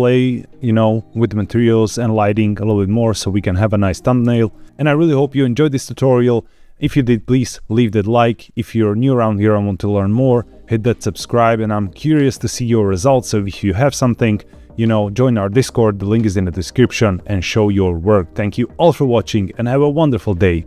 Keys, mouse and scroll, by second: 4.1 space.